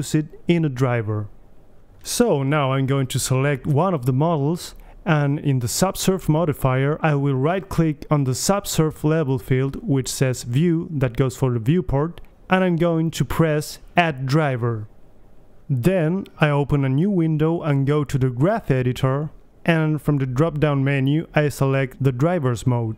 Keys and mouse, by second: 0.5-2.3 right drag, 3.2-4.8 drag, 4.0 right click, 4.8 alt+h, 5.2 right click, 5.4 a, 5.9-16.0 right drag, 16.9-18.6 drag, 21.3-22.2 drag, 22.2 Delete.